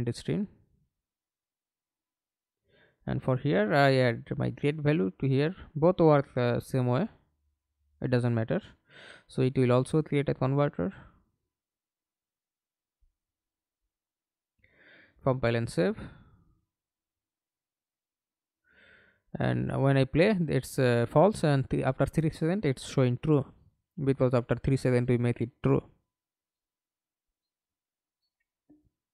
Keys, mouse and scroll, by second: 1.6 right click, 3.4 double click, 4.9 double click, 11.6 right click, 13.2 right click, 16.3 middle click, 17.1 F11, 17.7 alt+p, 23.5 Escape, 24.1 middle click, 24.9 F11.